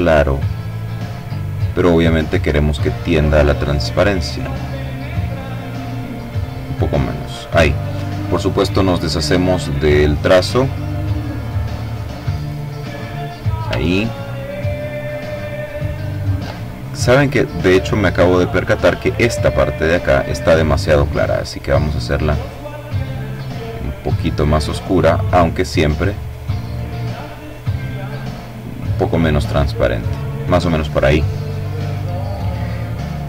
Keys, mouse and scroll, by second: 1.5-2.7 drag, 3.4 click, 4.7-5.8 drag, 9.0 click, 11.1 click, 12.6-13.1 ctrl+scroll down 2, 13.5-15.5 ctrl+middle drag, 15.6 click, 17.2 click, 18.4 click, 19.9-23.5 drag, 24.4-25.9 drag, 26.0-27.2 drag, 27.6 click.